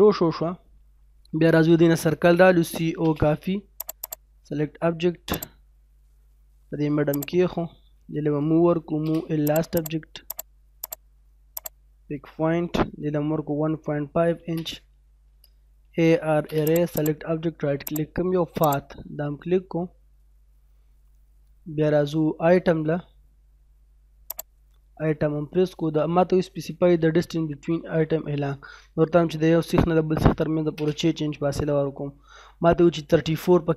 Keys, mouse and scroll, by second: 0.6 scroll up 1, 2.1-2.7 typing, 3.1-3.7 scroll up 1, 3.8 click, 4.0 right click, 4.5 scroll up 1, 5.3 click, 5.6-6.0 scroll down 1, 6.0 middle click, 7.2 click, 7.5 scroll up 1, 8.6 m, 9.0-9.5 scroll up 1, 9.5 click, 10.8 right click, 11.6 click, 13.1-16.3 typing, 14.4 scroll down 1, 16.6 click, 17.0 right click, 17.9 click, 19.2 scroll down 1, 19.8 middle click, 24.2 click, 30.2 6, 30.4 space, 32.3 scroll up 1, 33.2 scroll down 1.